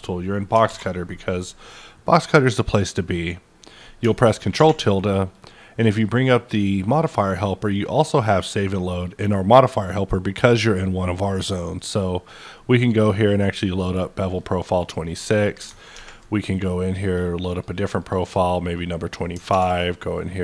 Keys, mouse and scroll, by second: 0.6 alt+w, 3.1-5.3 middle drag, 4.5 ctrl+`, 5.3-7.7 drag, 7.7-10.5 drag, 10.8-13.6 drag, 13.6 click, 14.4-17.0 middle drag, 17.0 click, 18.0 click, 18.2 double click, 18.7-20.4 middle drag, 19.5 ctrl+`.